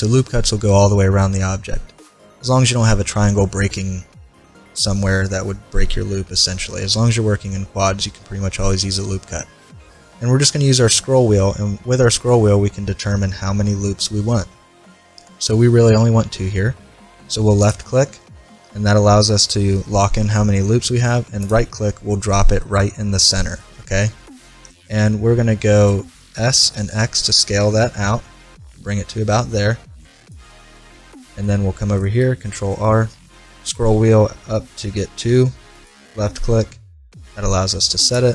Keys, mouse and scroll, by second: 22.1-25.5 middle drag, 26.3 s, 30.7-32.7 middle drag, 32.3 ctrl+r.